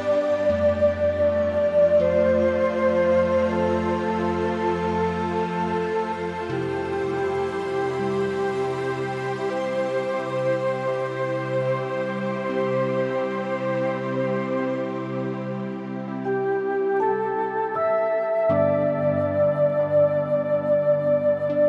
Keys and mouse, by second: 0.6 s, 2.7 click, 3.1 Tab, 3.4 middle click, 4.2 click, 4.6 `, 5.7 g, 6.4 click, 6.8 middle click, 7.6 click, 8.0 Tab, 8.2 click, 8.5 g, 8.7 z, 10.2 click, 10.5 Tab, 10.7 Tab, 10.9 Tab, 11.0 click, 11.2 middle click, 11.7 middle click, 12.2 shift+middle click, 16.7 a, 17.1 click, 18.2 ctrl+r, 18.8 Tab, 19.4 a, 19.7 ctrl+r.